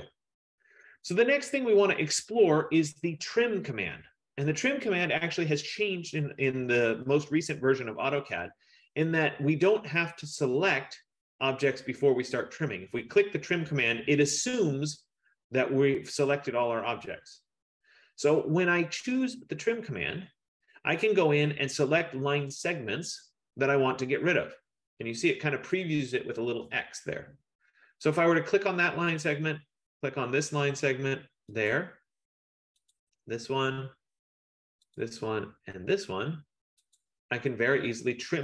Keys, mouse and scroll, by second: 8.6 click, 28.4 click, 31.7 click, 32.9 click, 35.1 click, 37.1 click.